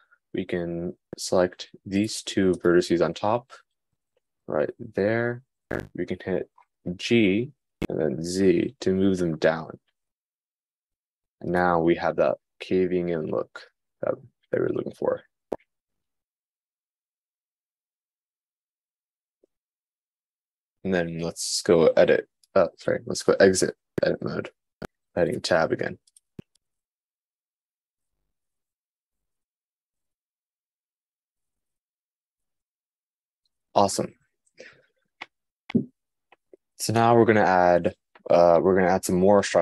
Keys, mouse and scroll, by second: 1.1 click, 1.7 shift+click, 25.6 Tab.